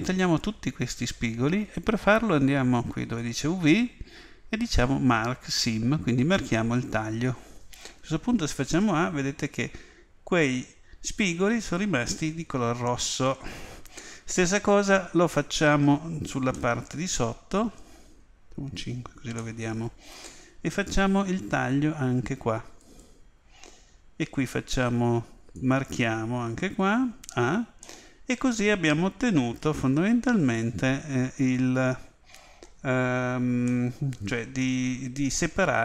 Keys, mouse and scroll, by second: 3.2 click, 6.3 click, 8.4 a, 16.5-18.5 middle drag, 19.4-20.9 middle drag, 22.8-25.5 right drag, 25.5 click, 27.2 a, 27.8-29.7 middle drag, 33.6-35.6 middle drag.